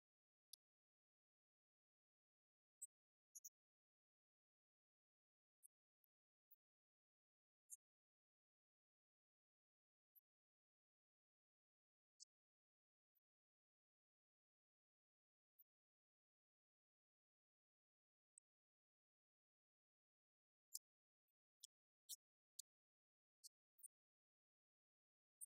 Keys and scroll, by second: 6.5 Down, 6.6 Up, 7.2 Down, 8.3 9, 8.6 Return, 9.7 Up, 10.6 9, 11.1 Right, 11.6 Left, 11.9 alt+Down, 13.8 Return, 14.3 Up, 14.7 Down, 16.8 Up, 19.2 alt+Down, 19.9 Up, 20.2 Return, 20.6 shift+Down, 21.3 ctrl+d, 21.8 Right, 22.9 5, 23.2 Right, 24.6 2.